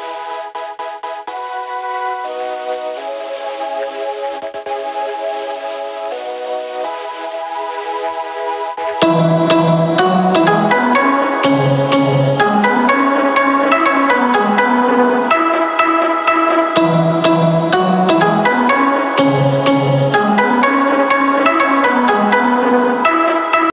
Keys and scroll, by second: 12.5 ctrl+s, 23.3 space.